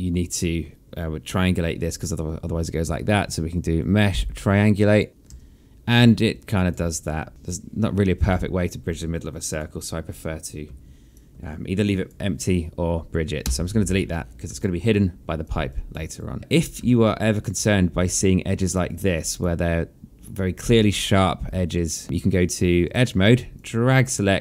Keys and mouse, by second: 2.4 1, 3.6 click, 5.1 3, 5.6 alt+click, 6.4 1, 7.3 click, 10.7 alt+click, 13.0 Delete, 14.2 alt+click, 15.3 alt+click, 15.6 right click, 16.3 click, 16.5 alt+click, 17.6 click, 19.4 alt+click, 21.6 alt+click, 22.0 right click, 23.1 click, 24.3 alt+click.